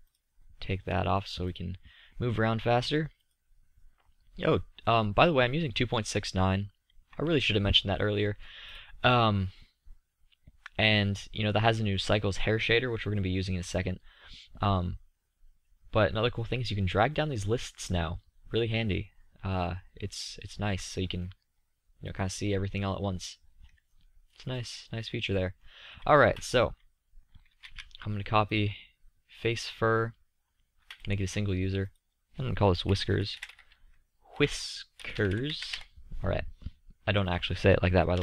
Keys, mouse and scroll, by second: 4.3-5.6 drag, 6.0-6.8 middle drag, 10.0-14.5 middle drag, 24.6 middle click, 27.1 middle click.